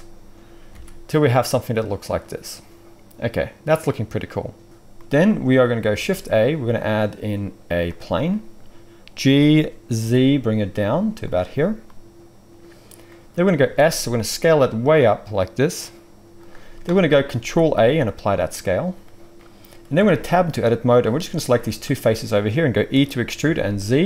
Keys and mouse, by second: 0.7 alt+a, 5.9 shift+a, 9.2 g, 11.2-20.9 middle drag, 13.6 s, 17.2 ctrl+a, 19.9 Tab, 20.9 click, 21.4-24.0 shift+middle drag, 22.9 e.